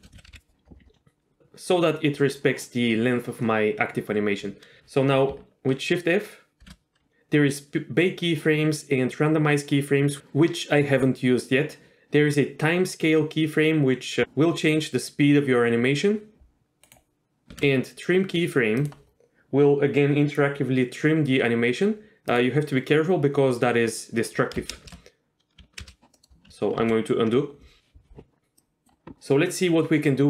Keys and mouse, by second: 0.0 middle click, 0.1 a, 0.3 KP_Decimal, 6.6 shift+f, 17.5 shift+f, 24.7 shift+space, 25.8 shift+space, 26.1-26.5 middle drag, 26.9 ctrl+z, 28.6 click, 29.1 ctrl+shift+s.